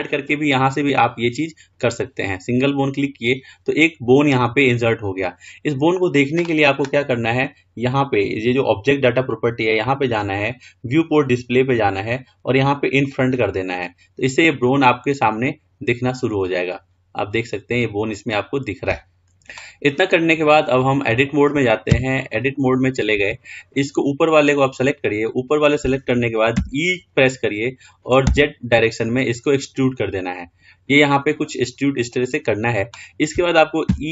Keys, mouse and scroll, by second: 0.0-2.8 drag, 9.4 click, 11.2 click, 12.0-13.3 scroll down 2, 13.3 click, 14.8-15.9 scroll up 3, 15.9-16.7 scroll down 2, 16.7-19.1 middle drag, 19.9-20.7 scroll up 2, 20.7-22.4 shift+middle drag, 22.4 Tab, 23.8 click.